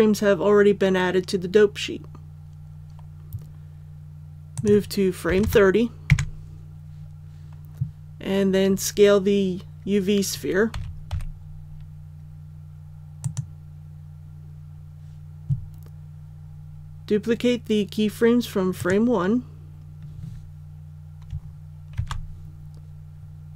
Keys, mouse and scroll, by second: 5.2 KP_3, 5.4 KP_0, 10.7 s, 11.1 z, 13.2 click, 18.7 right click, 21.9 shift+d.